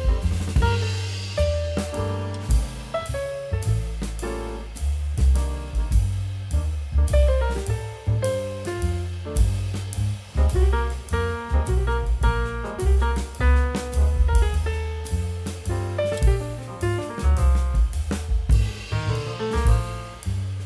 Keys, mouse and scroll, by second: 7.4 scroll down 1, 8.1-8.5 scroll up 1, 8.5 middle click, 8.7 scroll up 1.